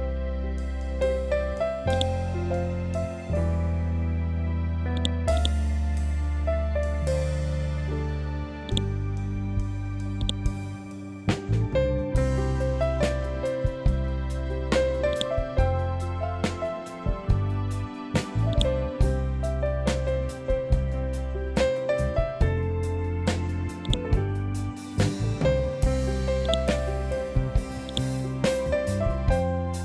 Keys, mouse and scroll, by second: 8.1 click, 8.7 scroll down 1, 9.7-11.2 drag, 11.2 scroll up 1, 14.5-19.5 drag, 19.5 scroll down 1, 21.6 scroll up 1, 23.3-29.8 drag.